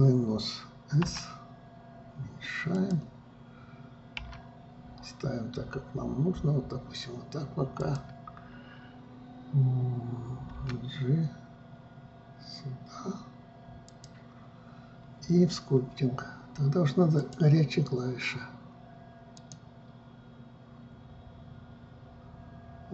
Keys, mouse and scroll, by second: 1.6 s, 4.8 r, 11.1 g, 17.7-20.8 drag.